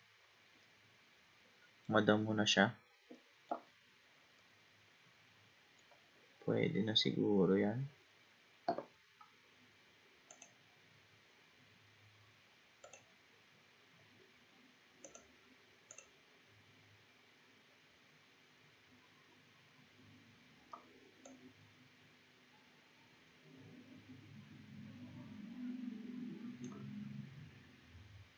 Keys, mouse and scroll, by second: 0.0-0.6 scroll down 3, 0.6-6.5 middle drag, 6.5-7.2 scroll up 5, 7.2-8.0 scroll down 4, 8.1-10.3 scroll down 2, 10.3-13.0 drag, 15.1 click, 15.9-18.9 drag, 21.3-24.3 drag, 27.6-28.3 scroll up 3.